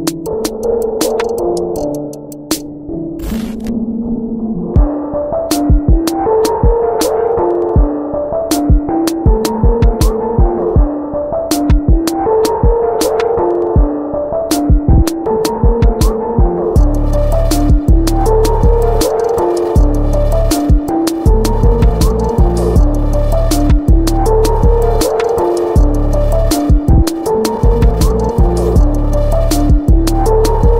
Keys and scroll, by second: 0.4 b, 1.4 ctrl+shift+g, 1.6-3.0 typing, 4.3-7.2 typing, 4.8 ctrl+z, 4.9 ctrl+x, 5.1 ctrl+z, 5.2 ctrl+x, 5.6 ctrl+z, 6.7 ctrl+z, 6.8 ctrl+x, 9.4 ctrl+alt+BackSpace, 10.5 x, 11.4 [, 11.4 [, 11.4 [, 13.1-14.2 typing, 16.6 v, 16.9 ctrl+t, 18.2 Return, 18.9 ctrl+=, 19.3 ctrl+s, 22.0 ctrl+z, 22.3 ctrl+t, 22.8 Return, 23.0 ctrl+shift+], 23.2 ctrl+t, 25.0 Return, 25.6 ctrl+t, 26.5 Return, 27.4 b, 28.0 ctrl+z, 28.1 ctrl+x, 28.7 ], 28.7 ], 28.7 ].